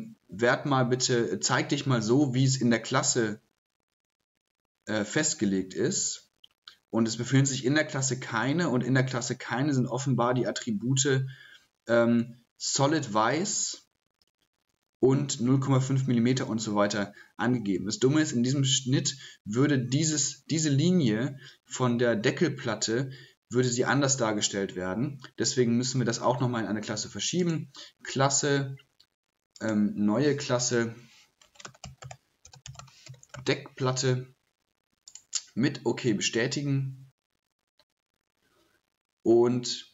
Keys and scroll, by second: 31.0-33.8 typing.